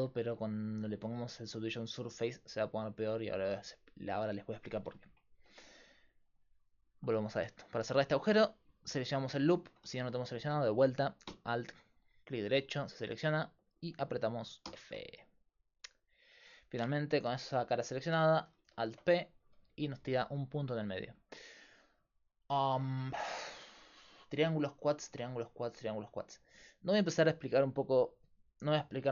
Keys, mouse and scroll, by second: 1.3-2.3 drag, 2.3 right click, 3.1-7.4 middle drag, 6.3-9.8 drag, 6.3-9.8 right drag, 7.1 Tab, 9.8 a, 11.0-12.2 middle drag, 12.2 right click, 13.0-14.7 drag, 14.7 f, 18.6 alt+p, 25.1-28.3 middle drag, 25.1 a.